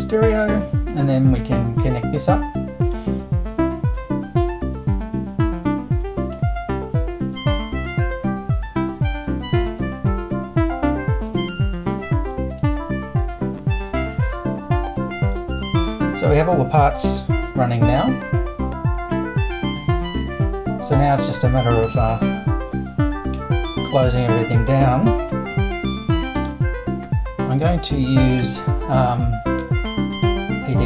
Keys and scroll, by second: 25.4 super+1, 27.5-28.9 typing.